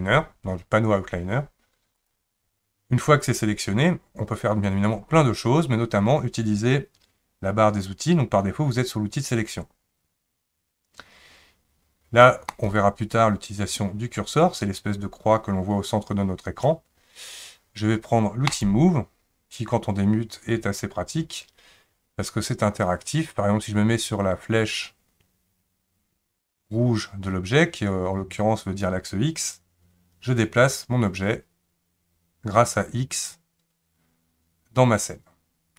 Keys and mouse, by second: 12.5 click, 18.6 click, 29.6 click, 30.1-35.7 drag.